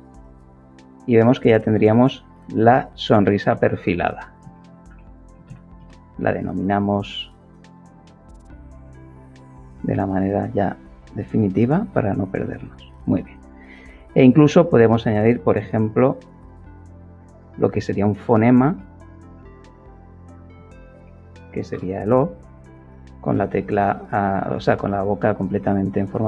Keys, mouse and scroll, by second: 2.6 click, 2.8 click, 4.4 shift+s, 4.9 i, 5.7 Return, 8.1 click, 9.0 click, 10.7-11.8 drag, 16.0 click, 16.9 click, 17.1 click, 18.4-21.0 typing, 21.6 Return, 25.3 click.